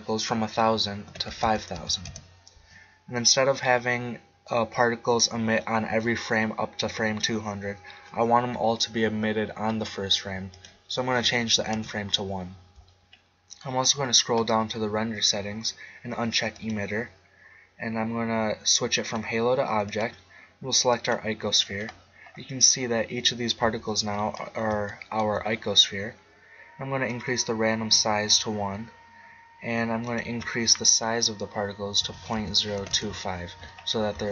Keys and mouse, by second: 1.4 0, 10.5-12.3 drag, 13.4-14.8 middle drag, 16.5-18.3 drag, 19.0-21.7 drag, 23.6 z, 24.9-26.8 middle drag, 27.1-28.9 drag, 30.1-33.6 drag, 34.0 middle click, 34.1 z.